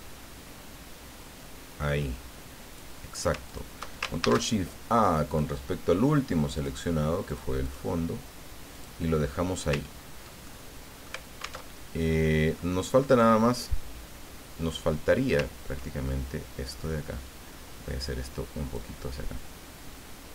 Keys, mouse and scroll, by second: 3.5 shift+click, 4.2 ctrl+shift+a, 5.3 click, 6.5 click, 7.3 click, 7.6 click, 8.7 click, 9.5-10.4 scroll down 4, 10.4 ctrl+click, 11.6 alt+Tab, 12.6 click, 16.6-18.9 drag.